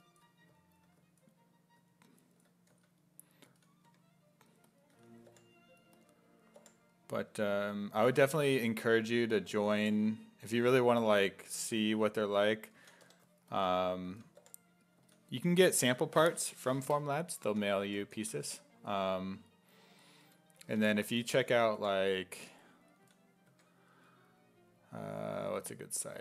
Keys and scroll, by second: 2.8 s, 3.5 s, 3.9 1, 5.0 s, 5.3 5, 7.7 1, 9.3 s, 9.8 5, 11.6 s, 11.9 3, 12.8 s, 13.0 3, 14.1 s, 14.4 5, 15.0 s, 17.2-19.0 typing, 20.7-23.5 typing, 25.5 s.